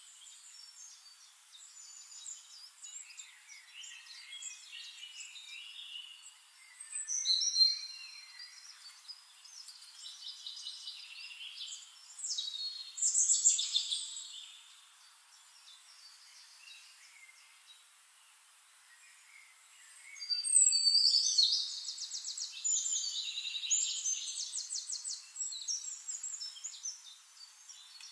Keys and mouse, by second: 5.1-6.2 shift+right drag, 6.7 click, 7.9-10.7 ctrl+shift+drag, 13.3-19.0 ctrl+shift+drag, 16.2-19.0 shift+right drag, 17.5 middle click, 18.5 middle click, 19.4-23.8 drag, 21.9-23.8 shift+right drag, 22.5-23.8 middle drag, 25.1-28.0 drag, 26.9-28.0 middle drag, 26.9-28.0 right drag.